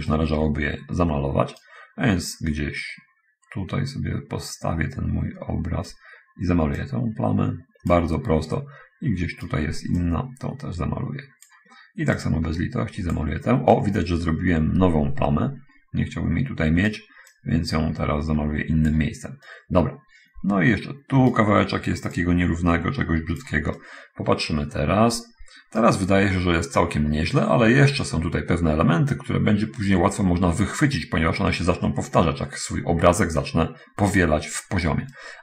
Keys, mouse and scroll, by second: 0.5-2.2 right drag, 2.8-6.4 right drag, 6.9-8.3 drag, 8.8-9.8 right drag, 10.4-12.0 drag, 12.6 click, 14.2-17.3 right drag, 17.3-19.4 drag, 19.9-21.9 right drag, 22.6-24.0 drag, 24.2-26.3 right drag, 35.3-35.4 right drag.